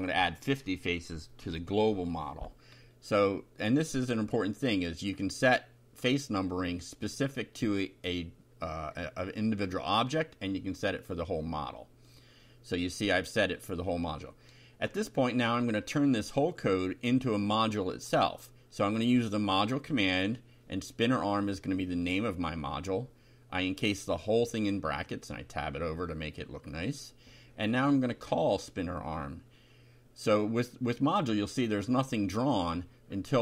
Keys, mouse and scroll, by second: 0.0 Up, 0.4 Return, 0.7 Up, 1.5-4.1 typing, 8.6 click, 11.9 ctrl+r, 12.4 ctrl+Up, 13.0 Return, 13.3 Up, 13.9-19.9 typing, 21.6 click, 22.6 shift+], 24.2-25.8 drag, 25.9 Tab, 26.6 click, 27.4 click, 28.1 BackSpace, 28.6 Up, 28.9 Return, 29.4 Up, 31.5 click, 32.5 ctrl+c, 32.9 ctrl+click, 33.2 ctrl+v.